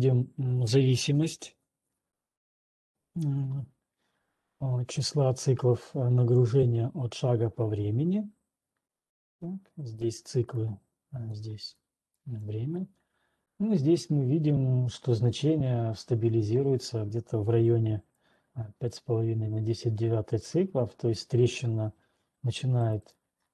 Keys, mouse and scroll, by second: 9.8 click, 10.8 click, 12.3 click, 12.8 click, 18.3 click.